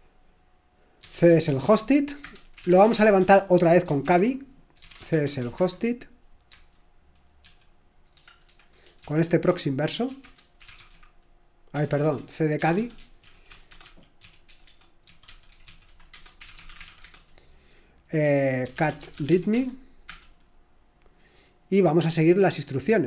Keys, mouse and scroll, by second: 0.7-3.5 typing, 4.0 ctrl+l, 4.5-20.9 typing.